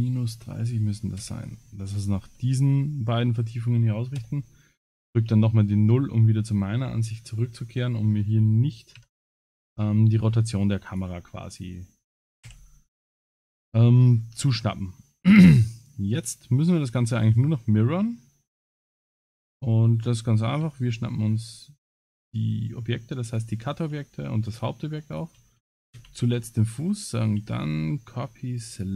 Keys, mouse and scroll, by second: 4.2 KP_0, 5.3 ctrl+s, 5.5-6.1 scroll down 4, 6.0-6.6 scroll up 5, 6.5 middle click, 7.2 scroll down 2, 9.0 KP_Divide, 9.6 scroll down 5, 10.4-11.0 scroll down 6, 10.9 click, 12.5 h, 12.8 middle click, 13.5 ctrl+s, 13.8-14.1 scroll up 6, 14.7 middle click, 14.7 scroll up 1, 16.2 click, 16.8 scroll up 3, 17.2 scroll down 6, 17.5 scroll up 4, 18.2 middle click, 19.9 middle click, 21.9 shift+click, 23.3 shift+click, 25.9 ctrl+c, 27.4 ctrl+c.